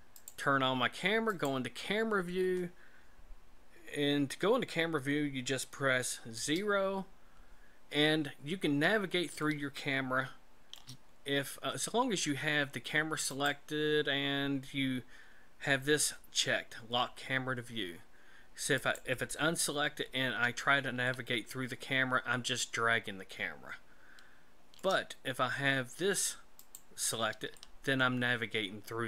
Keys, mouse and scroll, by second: 0.2 click, 1.3 click, 6.3 KP_0, 9.4 shift+middle click, 13.3 click, 18.8 click, 21.1 shift+middle click, 26.6 click, 27.6 shift+middle click.